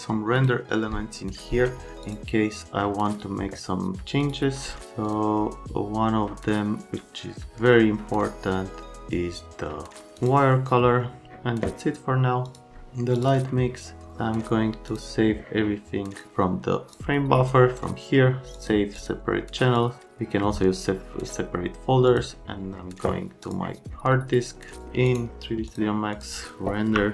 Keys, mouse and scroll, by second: 0.3 click, 2.0 click, 4.2 click, 5.0 click, 10.2 click, 12.4 click, 13.1 click, 14.9 click, 16.9 click, 18.5 click, 19.0 click, 19.8 click, 22.1 click, 23.4 click, 24.8 click, 25.1 right click, 25.7 click, 26.9-27.1 typing.